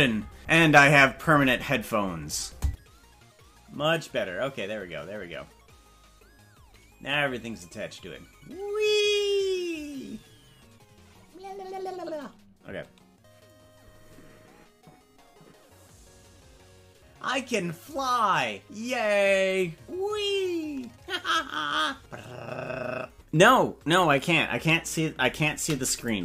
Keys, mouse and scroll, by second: 2.8 Tab, 2.8 right click, 3.0 click.